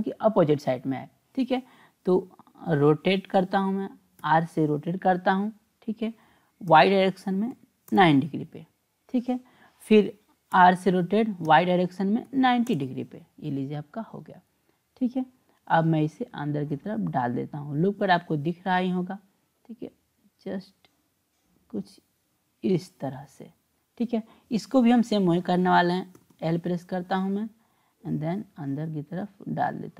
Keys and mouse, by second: 4.2 r, 10.5 r, 16.6-18.3 drag, 20.1-23.5 drag, 24.5 click, 26.2 l, 26.3 l, 27.7-29.9 drag.